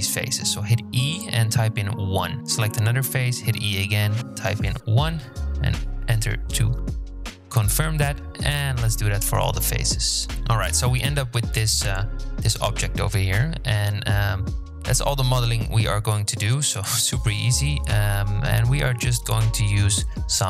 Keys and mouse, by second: 1.3 shift+middle click, 2.4 e, 4.4 click, 5.0 middle click, 5.5 e, 6.3 click, 6.8 e, 7.6 click, 7.9 click, 8.0 e, 8.6 click, 9.0 click, 9.4 e, 10.1-10.6 shift+drag, 10.3 shift+z, 11.1-11.7 drag, 12.6 drag, 12.9-15.0 middle drag, 16.1-17.0 shift+middle drag.